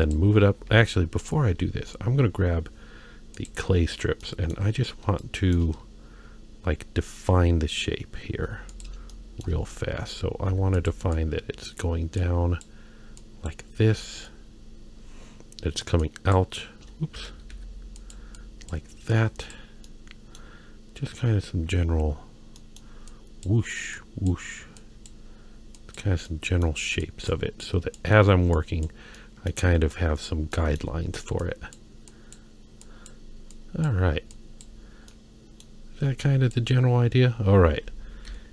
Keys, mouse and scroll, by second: 0.8 ctrl+z, 1.1-3.0 scroll down 1, 3.3 click, 3.8-4.2 scroll down 1, 4.2 middle click, 4.6-5.0 scroll down 2, 5.2 shift+middle click, 6.6-7.2 scroll up 2, 7.2-7.8 scroll up 1, 8.3 f, 9.1 shift+middle click, 9.6-10.4 scroll up 1, 10.4 f, 11.1 click, 12.2 click, 13.2 click, 14.2-15.0 scroll down 2, 15.0-16.0 scroll up 1, 16.0 click, 17.2 ctrl+z, 17.5 f, 18.4 click, 19.1 click, 19.9 middle click, 21.0-21.7 scroll down 1, 21.7-22.2 scroll up 1, 22.6 middle click, 23.1 click, 23.9 click, 24.8 click, 25.7 click, 26.2 middle click, 27.0 click, 27.6 click, 28.5 click, 29.2 middle click, 29.9 click, 30.5 middle click, 31.4 click, 32.1 click, 32.8 click, 33.5 click, 34.3 click, 35.1 middle click, 36.2 click, 36.9-37.4 scroll down 1, 38.3 i.